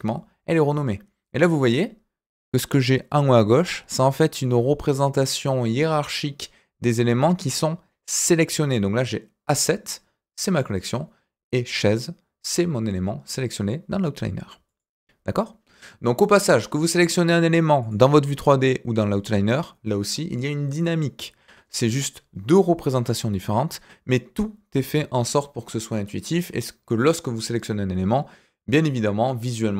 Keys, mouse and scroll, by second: 14.6 click, 17.8 click, 19.0 click.